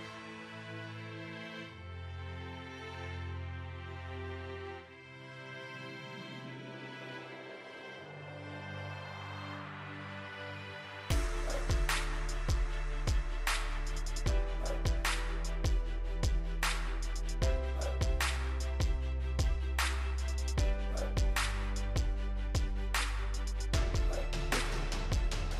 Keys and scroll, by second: 3.5 ctrl+j.